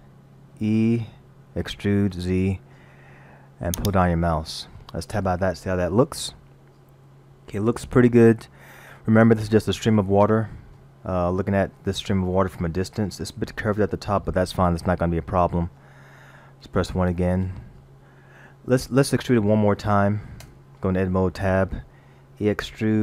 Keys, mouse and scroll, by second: 0.6 e, 5.1 Tab, 6.3 middle click, 11.2 middle click, 14.9 middle click, 16.9 KP_1, 18.4 scroll down 1, 20.4 Tab, 22.4 e.